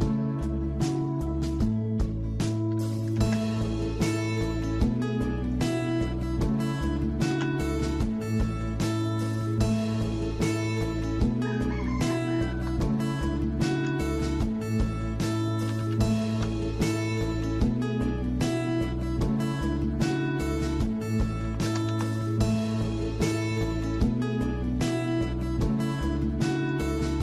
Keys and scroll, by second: 2.7 typing, 7.3 shift+2, 12.1-13.8 typing, 15.4-16.2 typing, 16.3 Return, 20.3-21.9 typing, 24.8 Escape.